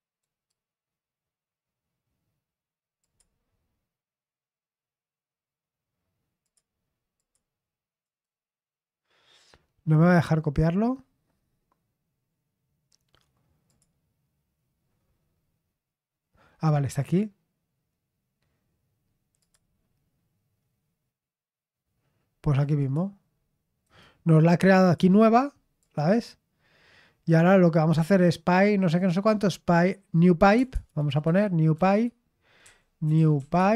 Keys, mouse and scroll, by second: 0.2-1.6 right drag, 3.0 click, 6.4 click, 7.1 click, 8.0-11.7 right drag, 13.6 click, 19.3 click, 22.7 click, 23.8 right click, 24.7 click, 25.7 click, 29.7 click, 30.5-33.7 typing.